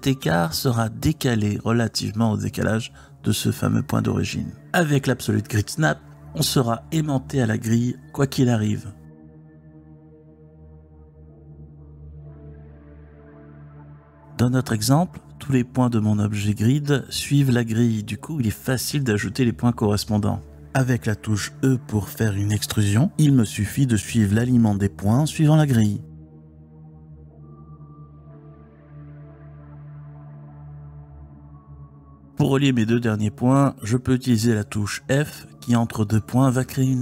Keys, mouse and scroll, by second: 1.3 e, 2.2 click, 2.6 e, 3.2 click, 5.6-7.5 drag, 8.3 click, 9.3 g, 9.8 click, 11.0 g, 11.6 click, 15.1 ctrl+z, 15.5 ctrl+z, 15.7 ctrl+z, 15.9 ctrl+z, 16.1 ctrl+z, 16.3 ctrl+z, 16.7 ctrl+z, 17.2 ctrl+z, 18.3 Tab, 20.1 click, 22.4 click, 22.9 e, 23.6 click, 23.9 e, 24.9 click, 25.2 e, 25.9 click, 26.2 e, 26.7 click, 27.0 e, 27.8 click, 28.1 e, 28.8 click, 29.1 e, 30.1 click, 30.4 e, 31.3 click, 32.6 click, 35.0 f, 36.7 ctrl+z.